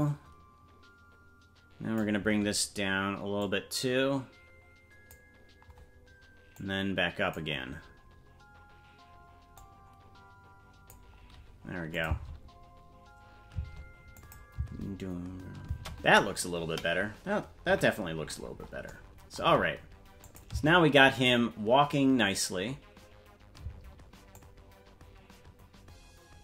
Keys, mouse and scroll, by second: 3.4-5.2 drag, 6.5 click, 9.5-11.0 drag, 11.9-13.7 drag, 12.1 space, 14.2 click, 14.5 space, 15.9 space, 17.6 KP_Decimal, 18.1-18.6 scroll down 1, 18.6 scroll down 10, 20.2 click, 20.5 space, 23.9 space, 24.3-26.4 drag.